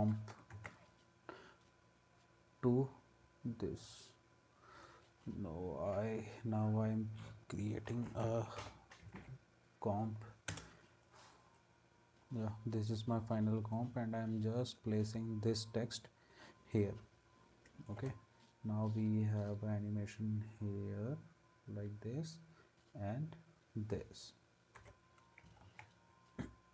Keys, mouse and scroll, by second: 0.5 ctrl+s, 7.9-9.7 typing, 10.5 Return, 18.0 space, 24.8 space, 25.7 ctrl+s.